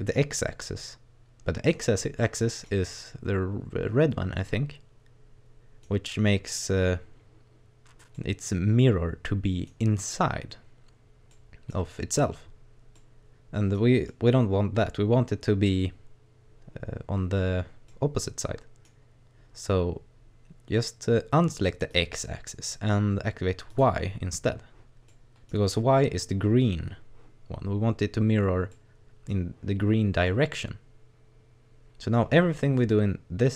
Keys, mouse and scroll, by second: 0.5 middle click, 1.8 scroll down 1, 2.2 middle click, 4.4 middle click, 8.2 middle click, 11.3 middle click, 12.2-13.0 scroll up 1, 13.0 middle click, 14.1 middle click, 17.9 middle click, 21.9 click, 23.7 click, 25.0 middle click, 25.5 scroll down 2, 28.1 scroll up 1, 28.7 middle click, 30.3 middle click, 32.8 right click.